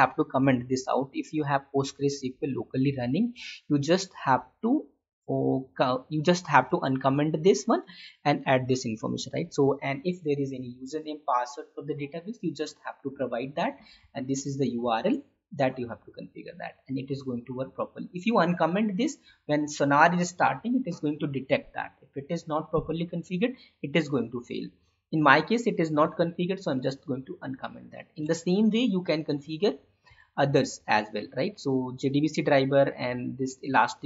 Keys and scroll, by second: 6.7 Tab, 7.5 alt+Tab, 14.1 Tab, 14.8 alt+Tab, 25.9 Left, 28.2 Tab, 29.2 alt+Tab.